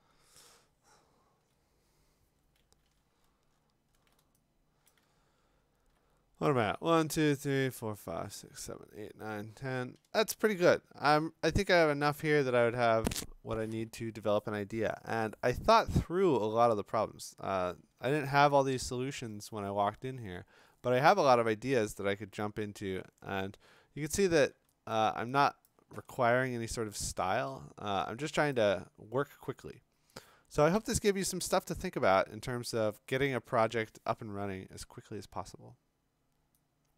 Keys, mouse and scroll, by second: 0.7-1.2 scroll, 1.3 click, 3.2-4.2 scroll, 4.9 click, 5.1-6.2 scroll, 6.4 scroll, 24.9-25.5 click, 25.1 click, 25.6 click, 25.7 click, 25.7 click, 25.8 click, 25.9 click, 25.9 click, 26.0 click, 26.1 click, 26.2 click, 26.2 click, 26.5 click, 26.5-27.7 scroll, 28.5 click.